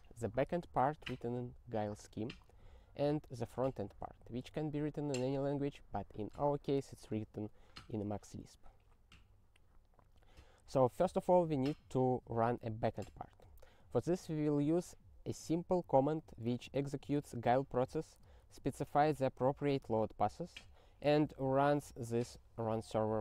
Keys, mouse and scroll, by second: 16.2 click, 16.7 ctrl+n, 16.9 ctrl+a, 17.0 ctrl+space, 17.8 ctrl+g, 18.1 ctrl+space, 18.4 ctrl+n, 18.4 ctrl+n, 18.6 ctrl+n, 19.5 ctrl+g, 20.3 ctrl+n, 20.7 ctrl+n, 21.0 ctrl+f, 21.6 ctrl+alt+@.